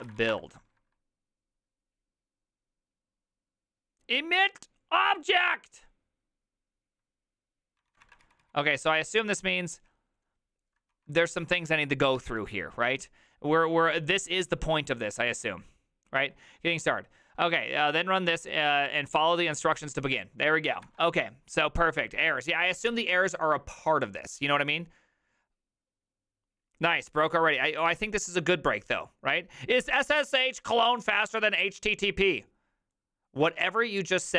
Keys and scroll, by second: 0.0-0.7 typing, 7.9 ctrl+a, 8.0 [, 8.2 ctrl+u, 8.4 ctrl+u, 10.9 shift+a, 11.4 ctrl+c, 11.5 ctrl+c, 11.6 ctrl+c, 20.8 alt+f.